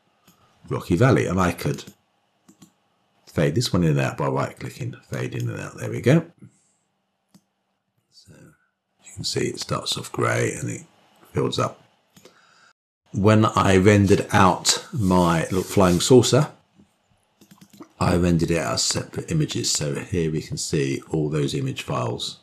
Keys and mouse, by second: 0.9 click, 2.9 click, 3.7-6.7 drag, 8.6-13.4 drag.